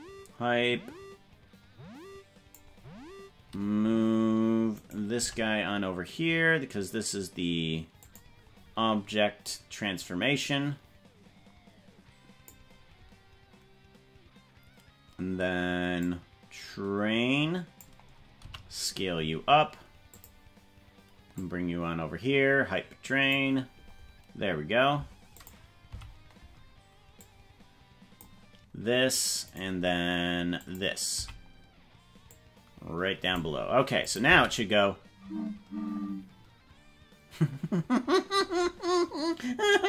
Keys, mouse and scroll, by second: 4.8 right click, 5.2 g, 9.4-12.7 drag, 16.1-17.9 drag, 18.4 s, 21.4-23.4 drag, 25.5 click, 26.0 Left, 27.2-28.3 drag, 29.5 right click, 30.6 click, 31.2 Left, 32.3-33.5 drag, 34.1 click, 34.2 space.